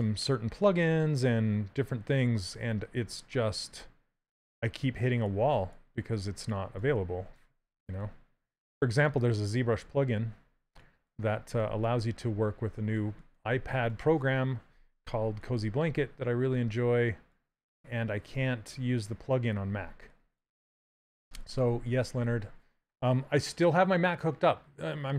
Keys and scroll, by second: 5.1 s, 15.0 s.